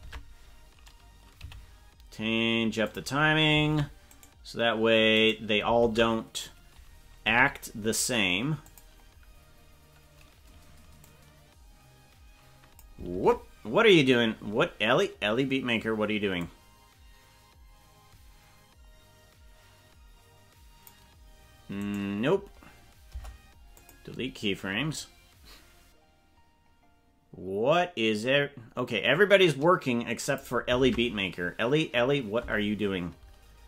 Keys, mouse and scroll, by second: 0.0 ctrl+Tab, 1.3 g, 3.7 ctrl+Tab, 4.1 right click, 5.1 right click, 5.8 ctrl+Tab, 7.2 g, 11.0-12.9 drag, 13.1 ctrl+Tab, 16.5-20.9 drag, 21.7 right click, 23.0 Delete, 25.0-30.5 drag, 30.9 ctrl+Tab.